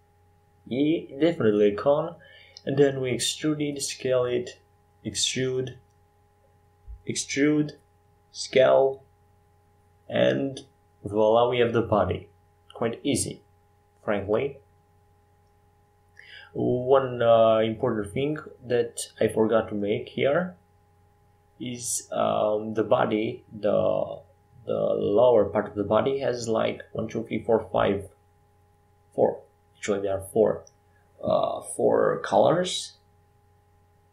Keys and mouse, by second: 2.9 x, 5.1-14.1 drag, 14.1 shift+d, 16.0-18.7 drag, 18.7 middle click, 20.3 s, 24.6 KP_5, 24.8 KP_7, 25.9 KP_1, 26.3 KP_5, 26.8 KP_7, 29.0 s, 31.1 g.